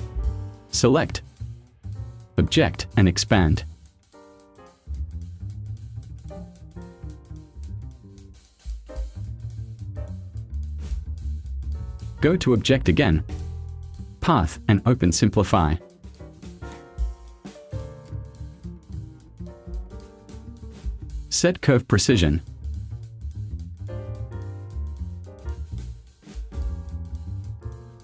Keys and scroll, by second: 9.1 space.